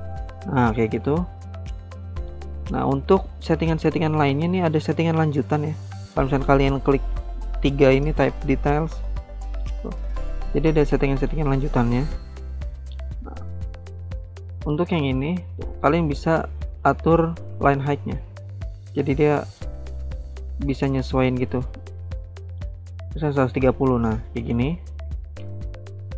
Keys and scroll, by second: 14.2 ctrl+z.